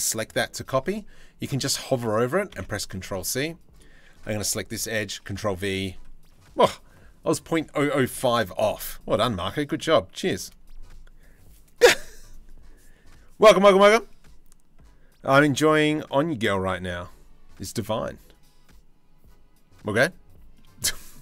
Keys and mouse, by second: 2.1 ctrl+c, 4.9 ctrl+v, 7.9 shift+middle click, 8.9 shift+middle click, 19.7 shift+middle click, 20.5 middle click.